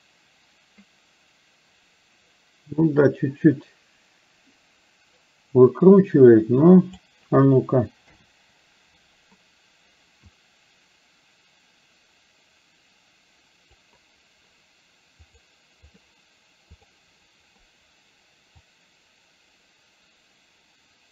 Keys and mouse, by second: 8.2 KP_7, 10.4-13.9 drag, 15.3 click, 16.9 click, 18.8 click, 19.4-21.1 drag.